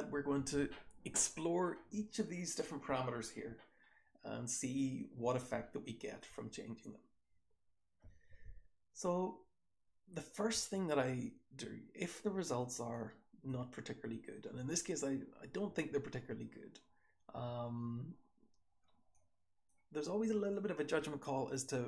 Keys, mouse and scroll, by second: 4.9-6.0 scroll down 1, 6.0 click, 6.0-8.2 scroll down 1, 8.2-9.0 scroll down 1, 8.2 h, 9.0-10.2 scroll down 1, 9.0 h, 10.2-12.3 scroll down 1, 12.3 click, 12.3-13.4 scroll down 1, 12.8-13.4 drag, 13.4 scroll down 1, 13.4 h, 14.5-17.2 typing, 15.2-15.8 scroll down 1, 16.4-17.2 scroll down 1, 17.2 scroll down 1, 19.2-19.6 drag, 21.0-21.8 scroll up 1.